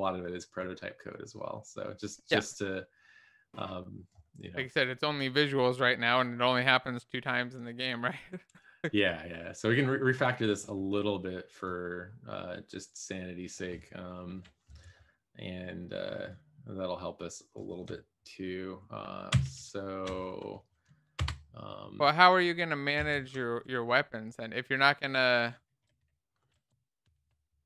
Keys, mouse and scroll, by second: 21.5 Return, 23.6 Left, 23.7 Left, 23.8 Left, 24.3 Left, 27.3 shift+F6.